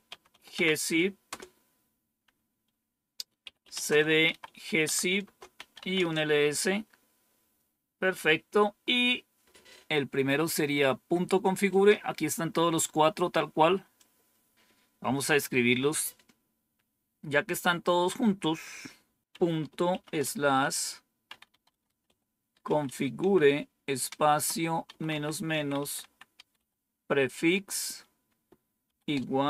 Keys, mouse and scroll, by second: 0.0-1.2 typing, 3.4-6.2 typing, 13.9 click, 15.1 click, 19.8 typing, 20.9-27.4 typing, 28.8 typing.